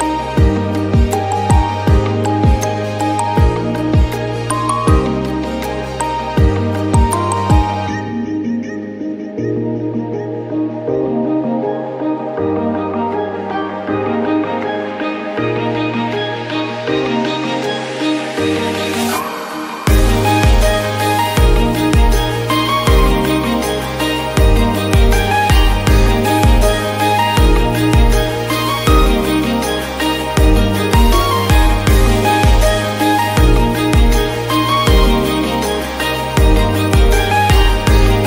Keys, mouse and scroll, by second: 0.1 shift+middle drag, 0.3 click, 0.9 ctrl+2, 1.4 drag, 1.6 click, 1.8 Tab, 2.1 scroll up 1, 2.3 scroll down 1, 2.5 shift+middle click, 2.7 scroll up 1, 2.8 shift+middle click, 3.5 2, 3.7 middle click, 4.1 alt+click, 4.5 alt+shift+click, 4.7 middle click, 5.3 alt+shift+click, 5.5 scroll down 2, 5.6 middle click, 5.8-6.1 scroll up 2, 6.1 alt+shift+click, 6.3 middle click, 6.9 alt+shift+click, 7.1 scroll down 4, 7.2 middle click, 7.4-7.7 scroll up 2, 7.7 alt+shift+click, 7.9 middle click, 8.1-9.3 scroll up 2, 8.7 middle click, 9.3 alt+shift+click, 9.5 scroll down 3, 9.6 shift+middle click, 9.7 scroll up 1, 9.9 shift+middle click, 10.7 ctrl+b, 14.7 shift+middle click, 15.0-15.5 scroll up 7, 15.5 shift+middle click, 15.9-16.3 scroll down 15, 16.3 shift+middle click, 16.7 click, 17.0 Tab, 17.1-17.6 scroll up 1, 17.6 right drag, 17.9 scroll down 1, 18.0 shift+middle click, 18.1-18.5 scroll up 6, 18.5 scroll down 4, 18.6-19.1 middle drag, 19.1 click, 19.4 KP_1, 19.7 scroll up 1, 19.9 scroll down 1, 20.1 middle click, 20.6 ctrl+s, 20.9-21.5 scroll up 1, 21.5 click, 22.1 KP_Divide, 22.4 middle click, 22.5 scroll up 1, 22.8 shift+middle click, 23.1 Tab, 23.2-23.9 scroll up 3, 23.9 click, 24.4 alt+click, 24.5 scroll down 2, 24.7 middle click, 25.1-25.6 scroll up 1, 25.6 alt+shift+click, 26.6 scroll down 2, 26.7 middle click, 27.0-27.4 scroll up 1, 27.7 middle click, 27.8 scroll up 1, 28.8-29.9 middle drag, 29.9-30.5 scroll up 1, 32.4 scroll down 2, 32.5 middle click, 33.1-34.0 drag, 34.4 click, 34.9 Tab, 35.1 scroll up 4, 35.7 scroll down 2, 35.9-36.9 right drag, 37.1-37.5 scroll down 1, 37.5 a, 38.1-38.2 drag.